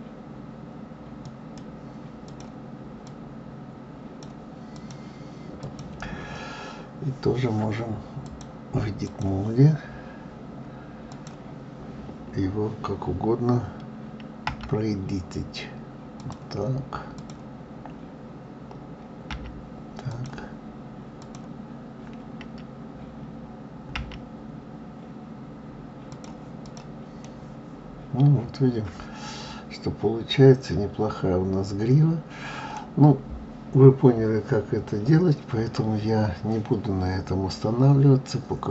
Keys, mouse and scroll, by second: 2.3 click, 3.0 click, 4.7 click, 5.6 click, 8.2-11.2 drag, 17.1 click, 19.3 g, 21.2 click, 23.9 g, 26.6 click, 27.2-30.2 middle drag, 32.8-33.7 scroll down 4, 32.9 middle click, 33.7-34.5 scroll up 2, 34.5-37.0 scroll down 1, 37.0-37.5 scroll down 1.